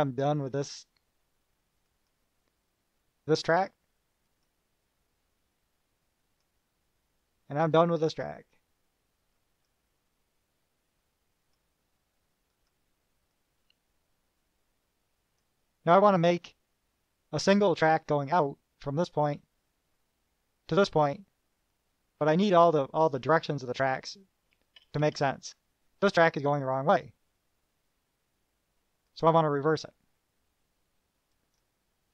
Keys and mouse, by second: 0.4 click, 2.3 click, 4.5 click, 6.5 click, 9.6 click, 11.7 click, 12.7 click, 13.5-15.7 drag, 21.9-22.8 drag, 24.7 KP_Add, 29.3 click, 31.5 middle click.